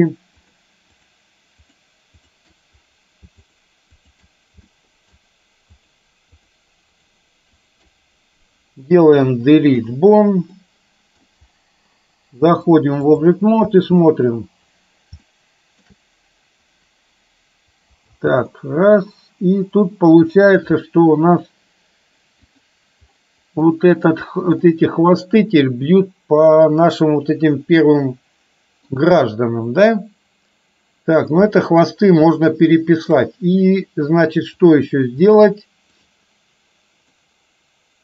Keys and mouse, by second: 0.5 shift+click, 1.0 shift+click, 2.3 shift+click, 3.5 shift+click, 4.7 shift+middle click, 5.8 shift+click, 6.4 shift+click, 6.9 shift+click, 7.7 shift+click, 9.3 Delete, 10.5 middle click, 12.8-13.4 drag, 13.8 space, 15.4-16.0 shift+middle drag, 18.2 space, 18.7-20.5 middle drag, 21.4 click, 22.5 click, 23.8 middle click, 24.8-28.9 middle drag, 31.4 KP_3, 32.4-33.2 shift+middle drag, 34.7 click, 37.2-38.0 middle drag.